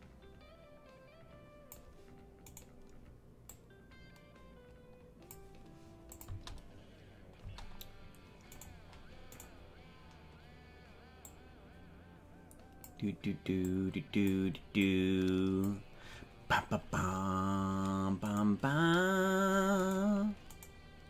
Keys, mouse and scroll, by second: 2.6 right click, 3.5-5.4 drag, 6.2 click, 6.3 space, 7.4 space, 8.6 right click, 9.6 right click, 11.2-13.0 drag, 13.8 click, 14.8-15.8 drag, 18.2 right click, 19.8 right click, 20.6 right click.